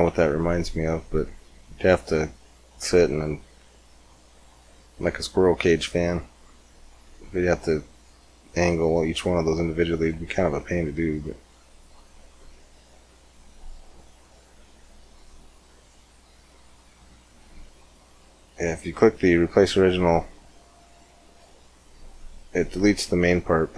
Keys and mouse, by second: 3.4-4.6 middle drag, 7.7-9.9 drag, 9.9-11.3 middle drag, 11.3-17.2 drag, 16.5 middle click, 17.2-18.5 middle drag, 19.2-20.7 drag.